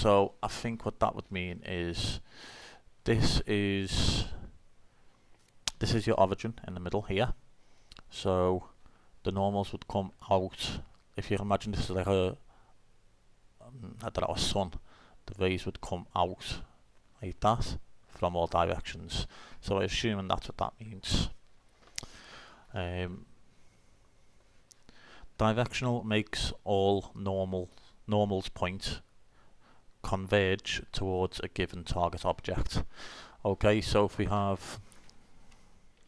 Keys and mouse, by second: 1.6-3.5 middle drag, 20.1-21.9 middle drag.